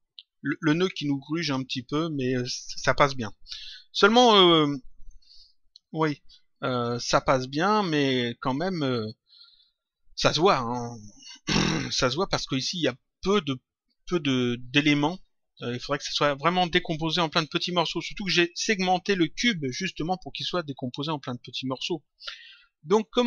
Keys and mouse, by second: 1.4 click, 2.8 click.